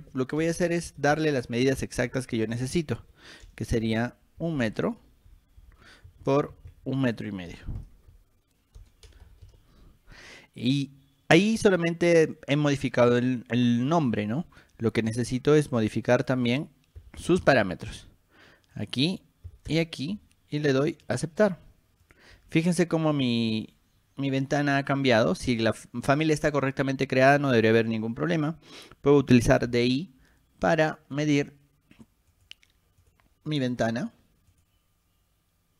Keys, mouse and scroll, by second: 0.6 BackSpace, 0.8 BackSpace, 2.7-5.8 typing, 8.0 5, 9.2 BackSpace, 9.6 Return, 16.3 click, 18.9 click, 21.2 click, 22.2 click, 29.5 d, 29.9 i, 31.3 click, 32.5 click, 33.2 click, 34.7 click.